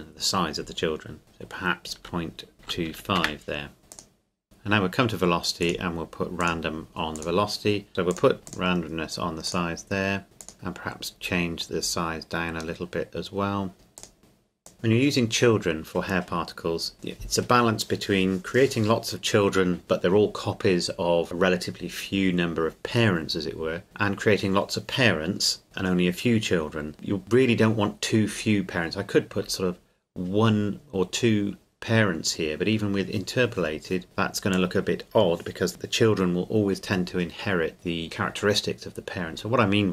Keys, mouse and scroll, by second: 2.0 KP_Decimal, 2.6 KP_2, 2.9 KP_5, 3.2 KP_Enter, 3.8 click, 3.9 click, 8.1 click, 11.3-12.0 scroll down 1, 14.0 click, 14.6 click, 34.5 click.